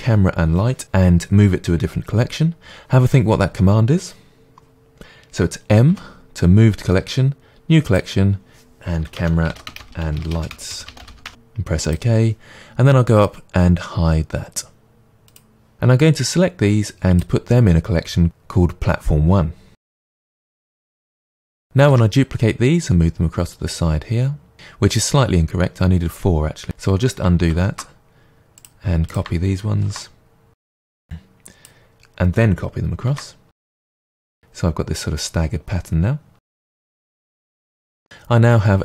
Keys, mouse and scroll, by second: 5.9 m, 15.3-15.7 drag, 16.0-17.2 drag, 19.7 m, 21.9 shift+d, 24.5 click, 26.6 right click, 27.2 ctrl+z, 28.6-29.1 drag, 29.8 shift+d, 31.0 click, 33.1 shift+d, 34.3 click, 36.5-36.8 shift+drag, 36.8 g, 37.7 click, 38.0-38.8 middle drag.